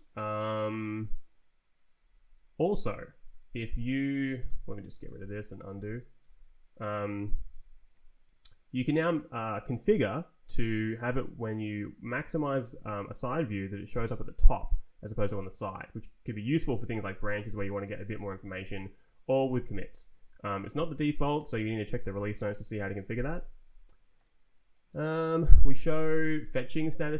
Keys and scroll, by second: 2.0 Up, 4.4 shift+d, 5.0 Return, 5.7 z, 6.2 Return, 8.7 Right, 12.1 shift+=, 13.2 Down, 14.5 Up, 18.3 Right, 18.9 Down, 19.7 Down, 19.8 Up, 20.3 Up, 21.4 shift+-, 22.1 Left, 26.0 ctrl+t, 26.3 Down, 27.0 Up.